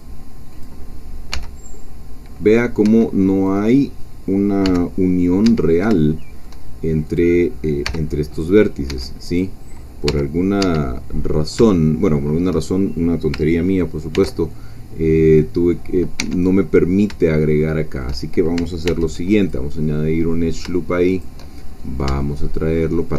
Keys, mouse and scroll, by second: 0.5 click, 1.3 g, 2.9 Escape, 3.5 click, 4.7 g, 5.5 Escape, 6.0-7.0 shift+middle drag, 7.2 click, 7.8 g, 8.9 Escape, 9.3 click, 10.1 g, 10.6 Escape, 11.3 middle click, 11.3-11.6 scroll down 1, 11.7-13.0 shift+middle drag, 14.1 ctrl+r, 16.2 Escape, 16.6 middle click, 17.2-18.5 shift+middle drag, 18.9 ctrl+r, 19.4 ctrl+click, 21.1 shift+click, 21.6-22.1 shift+scroll up 3, 22.2-23.1 shift+middle drag.